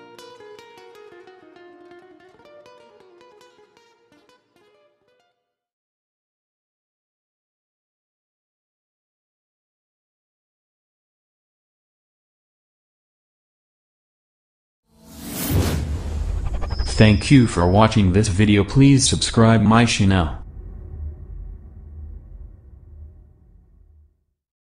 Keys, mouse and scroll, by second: 0.1 scroll up 1, 0.8-4.0 drag, 4.4 scroll down 1, 4.8-5.2 scroll up 1, 5.8 right click, 6.3 click, 7.1 scroll down 1, 7.5-7.9 scroll up 1, 8.1-8.4 scroll down 1, 8.7 middle click, 9.3 scroll up 1.